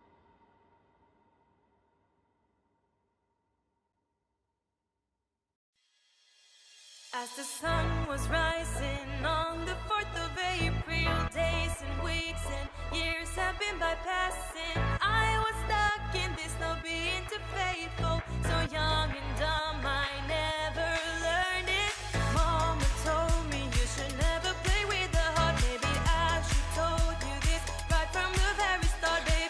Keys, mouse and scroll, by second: 4.2 right click, 8.9 right click, 9.2 ctrl+click, 10.4 ctrl+e, 13.4 ctrl+i, 15.0 typing, 16.3-17.0 typing, 25.2 ctrl+click, 25.8 right click, 25.8 ctrl+click.